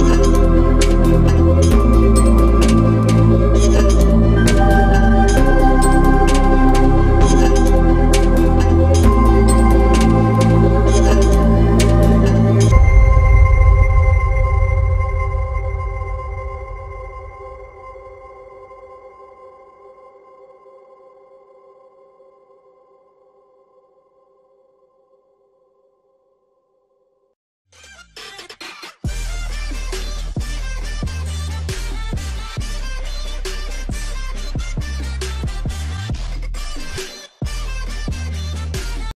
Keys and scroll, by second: 13.0 alt+shift+e.